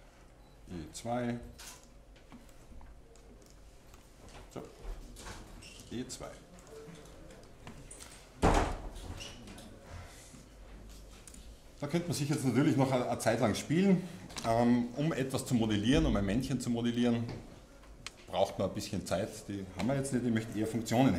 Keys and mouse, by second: 0.2 e, 1.1 middle click, 1.8-2.9 drag, 3.5-5.1 middle drag, 5.1 e, 6.7-8.5 drag, 8.5-9.5 middle drag, 9.5-11.2 drag, 11.3 Tab, 12.9 Tab, 13.8 Tab.